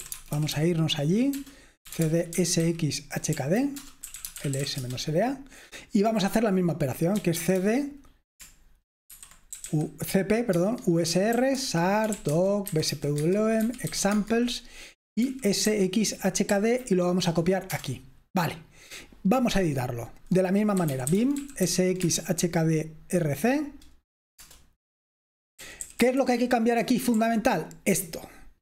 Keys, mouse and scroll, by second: 0.0-5.1 typing, 7.1-7.9 typing, 9.0-14.1 typing, 10.5 Tab, 15.3-16.5 typing, 17.9 Return, 20.7-22.2 typing, 24.5 Return, 25.6-28.6 typing.